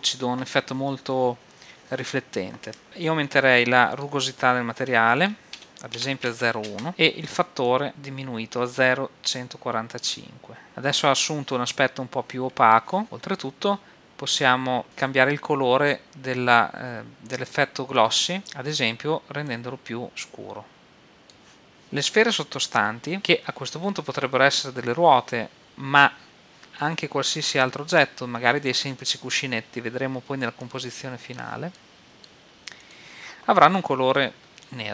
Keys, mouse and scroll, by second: 3.9-7.3 drag, 7.6-8.9 drag, 10.7 middle click, 14.8 middle click, 15.6-16.4 scroll up 1, 18.4-19.6 drag, 21.8-23.9 right drag, 30.6-33.1 middle drag, 33.1-34.4 right drag.